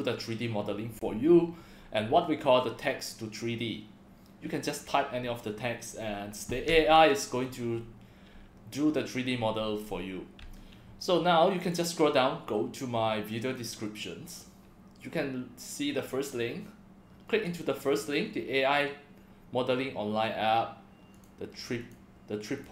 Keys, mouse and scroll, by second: 11.6 click, 13.5 click, 13.8-14.4 scroll down 2, 16.3-17.4 drag, 21.1 click, 21.8 click, 22.5 click.